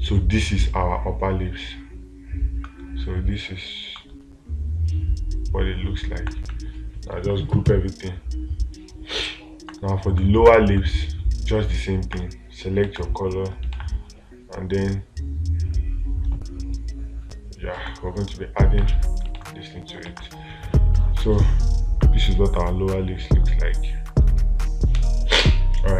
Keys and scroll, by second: 13.3 space, 14.2 space, 19.2 space, 19.8 space.